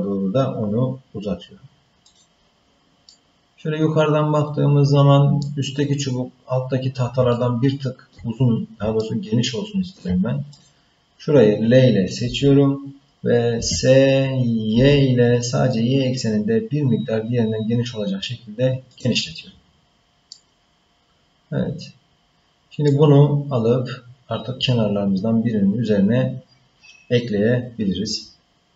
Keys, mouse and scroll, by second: 3.1-5.4 middle drag, 6.0-6.7 scroll down 2, 6.7-7.2 scroll up 1, 7.3 ctrl+middle click, 9.0-10.0 shift+middle drag, 10.5 click, 12.2 l, 13.5 s, 19.7-20.3 scroll down 1, 20.3-22.8 middle drag.